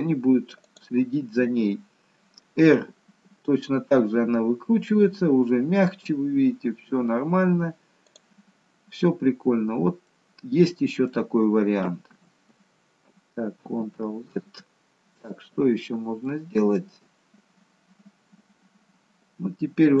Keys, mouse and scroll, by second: 2.9 r, 10.1 middle click, 12.5 ctrl+z, 14.1 ctrl+z, 15.4-16.2 scroll down 2, 16.2 middle click, 16.2-16.7 scroll down 1, 17.0-18.6 scroll down 1.